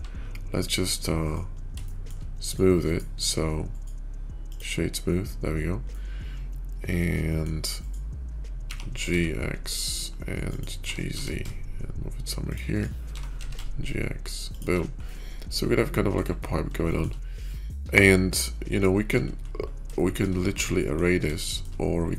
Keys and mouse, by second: 0.3 q, 1.7 middle drag, 3.1-4.4 drag, 5.8-7.4 middle drag, 8.4 g, 10.7 g, 13.0 g, 15.0-16.0 middle drag, 16.8 shift+middle click, 17.5 middle drag, 18.3-19.0 middle drag, 19.8-20.1 shift+middle drag, 20.7 middle click, 21.3 shift+middle click.